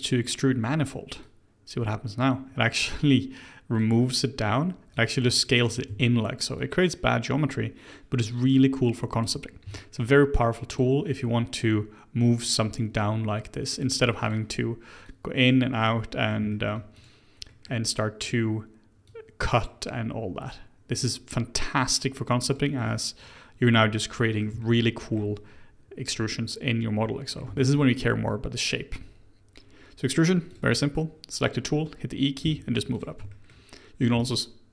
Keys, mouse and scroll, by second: 4.0 scroll up 2, 4.9 click, 5.9 ctrl+z, 6.6 click, 9.5 scroll up 1, 9.7 shift+middle click, 10.7 click, 11.6 click, 14.2 click, 15.0 click, 15.8-16.9 middle drag, 16.9 click, 17.5 middle click, 18.2 click, 19.0 click, 20.5 click, 22.8-30.5 middle drag, 30.5 click, 32.4 e, 33.3-34.7 shift+middle drag.